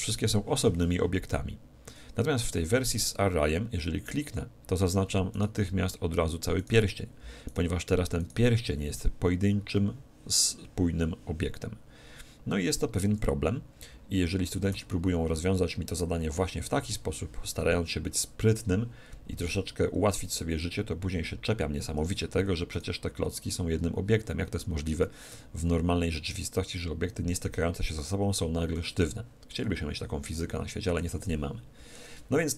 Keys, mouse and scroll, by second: 2.4 5, 4.0-9.9 right drag, 14.4 a, 14.7 z, 18.6-20.5 middle drag, 22.7-24.5 right drag, 25.3 g, 29.6-32.5 middle drag.